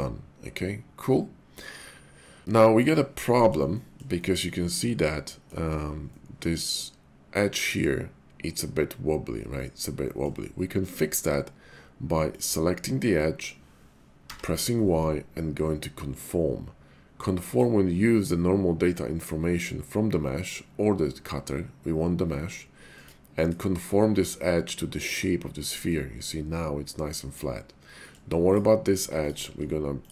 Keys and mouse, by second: 3.7 shift+middle click, 4.2-5.4 middle drag, 6.1-7.8 middle drag, 10.0 middle click, 12.3 alt+click, 14.2 y, 22.9 click, 25.8-27.4 middle drag, 28.0 middle click.